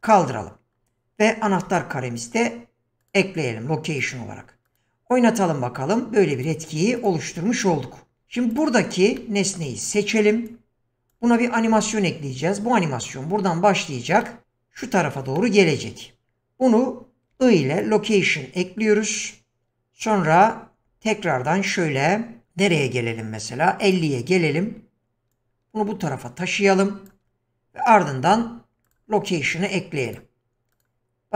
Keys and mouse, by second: 1.5 i, 4.1 drag, 6.3 click, 7.0 click, 9.6 middle click, 10.4-11.1 drag, 20.1-23.9 drag, 25.4-27.1 drag, 30.0 click, 30.7 click.